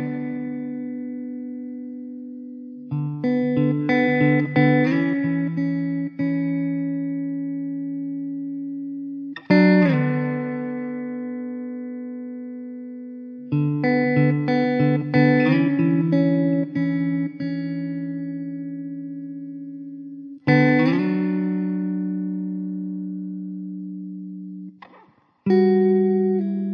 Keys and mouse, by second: 0.8 middle click, 14.3 alt+w, 16.2 alt+q, 17.5 alt+q, 19.4 alt+w, 25.1 alt+w, 26.4 1.